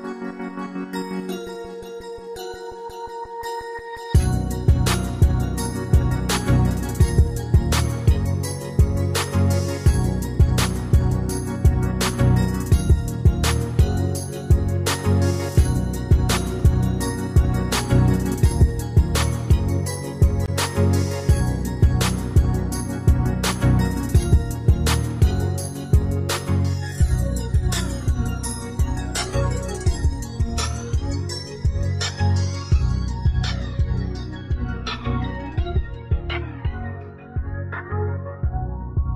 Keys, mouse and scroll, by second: 27.4 Return, 37.9 Escape.